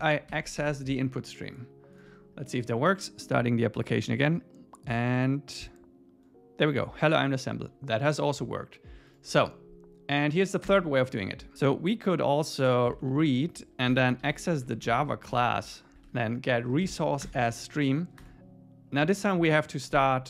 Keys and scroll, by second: 0.3 super+s, 10.7 Return, 15.3 Return, 17.2 Return, 19.0 Tab.